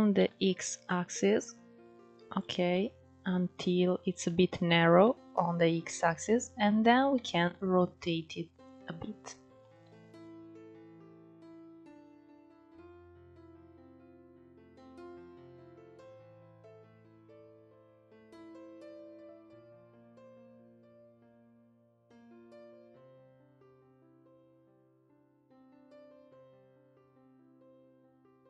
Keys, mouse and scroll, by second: 2.4-5.6 middle drag, 5.6 scroll down 4, 5.9 middle click, 6.2-6.8 scroll up 2, 6.8 r, 8.5-9.5 middle drag, 9.5 r, 10.4 g, 10.6-11.2 middle drag, 11.2 r, 11.4 middle drag, 11.5 scroll down 2, 11.6 click, 11.7 middle click, 12.0 middle drag, 12.2 scroll up 5, 12.4 click, 12.5 click, 12.8 s, 13.1 click, 13.3 scroll down 2, 13.3 middle click, 13.6 middle drag, 13.9 KP_1, 14.0-14.4 scroll up 3, 14.2 alt+z, 14.4 click, 14.6 click, 15.1 alt+z, 15.2 click, 15.3 alt+z, 15.5 scroll up 1, 15.6 g, 15.9 alt+scroll down 1, 16.0-16.6 middle drag, 16.6 click, 16.7-17.1 middle drag, 17.1 click, 17.3 click, 17.5 middle click, 17.9 Tab, 18.2 scroll up 2, 18.6 middle click, 19.0 click, 19.7 shift+click, 20.1 middle click, 20.8 click, 23.1 scroll down 2, 23.3 Tab, 23.8 scroll down 2, 23.9-25.2 middle drag, 25.2-26.9 scroll up 1.